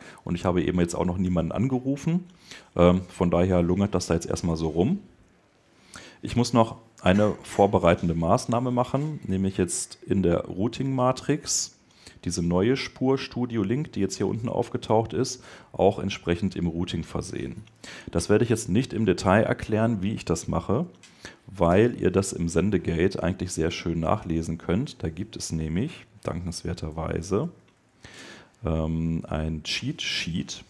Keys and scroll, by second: 4.3 super+Tab, 19.7 super+Tab, 27.6 Return.